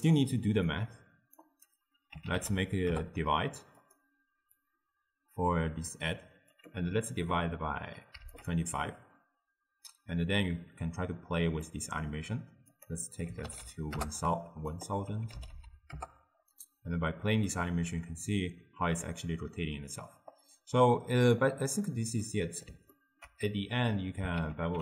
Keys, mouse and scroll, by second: 0.8-3.9 drag, 4.7-8.5 drag, 11.7-12.8 middle drag, 12.8 click, 13.6 0, 14.8 click, 15.5 0, 15.7 0, 17.3-20.5 drag, 21.6 click, 22.3 middle click, 23.0-24.4 ctrl+middle drag, 24.4 ctrl+a.